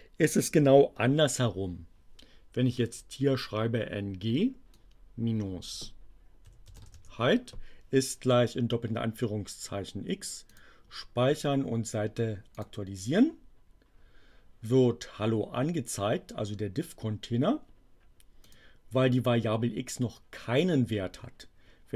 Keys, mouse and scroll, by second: 4.7-5.8 drag, 6.2-7.3 typing, 10.5 click, 12.5 click, 18.3 click.